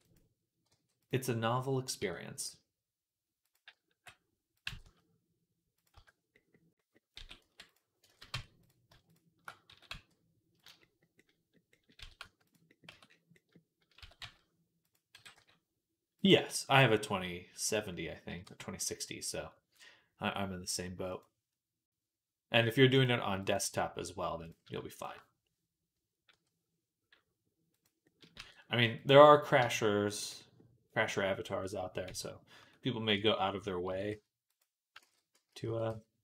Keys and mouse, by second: 0.0-0.5 typing, 1.8 Tab, 2.3 s, 3.5 g, 4.5 g, 5.8 z, 7.0 s, 7.9 ctrl+z, 8.2 Tab, 8.4 click, 8.5-15.7 shift+middle drag, 9.5 s, 11.8 s, 12.7 Tab, 13.8 s, 15.0 g, 18.3 Tab, 21.0-22.9 drag, 23.2-24.3 drag, 24.3 middle click, 24.8 shift+click, 24.9-35.5 shift+middle drag, 26.1 i, 28.2 e, 29.4 Tab, 31.9 Tab, 32.4 Tab, 33.0 Tab, 33.7 s, 34.9 ctrl+z, 35.2 a, 35.5 s.